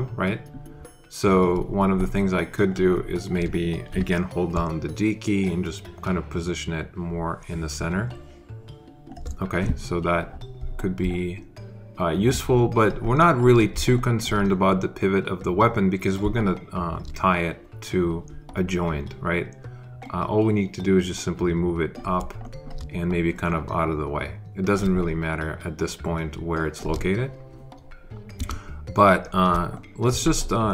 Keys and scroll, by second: 5.4 d, 28.2 space.